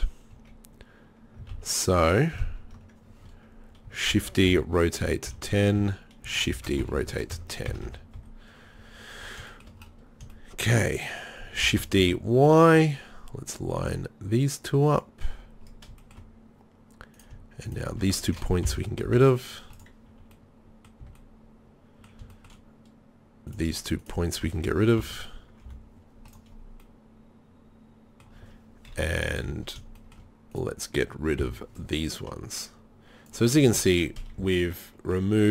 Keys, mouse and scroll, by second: 0.4 KP_1, 1.6 ctrl+KP_3, 2.4 ctrl+KP_1, 4.1 shift+d, 6.5 shift+d, 7.7 a, 7.9 a, 8.2 KP_3, 11.7 shift+d, 17.2-18.7 right drag, 18.7 ctrl+l, 19.1 Delete, 21.1 z, 23.5-24.4 right drag, 25.1 ctrl+l, 25.7 Delete, 29.1 KP_3, 29.4 z, 31.4 b, 33.6 Delete, 34.4 z.